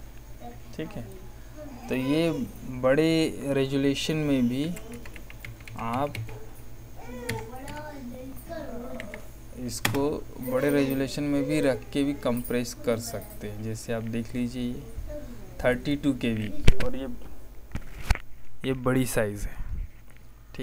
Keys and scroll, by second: 4.3-7.6 typing, 8.9 BackSpace, 9.8 Return.